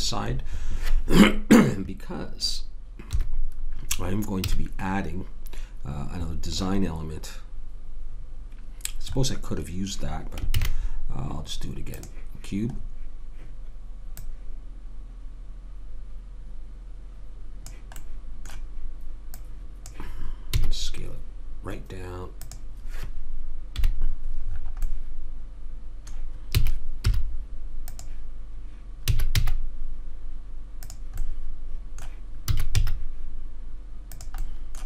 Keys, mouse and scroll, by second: 3.1 KP_7, 4.5 a, 10.5 shift+a, 13.2 middle click, 14.1 right click, 14.3 click, 17.9-19.8 middle drag, 19.3 click, 19.3-21.0 right drag, 20.6 s, 23.7 KP_Decimal, 24.5 middle click, 24.9 middle click, 26.2 middle click, 26.5 s, 29.1 s, 32.5 s.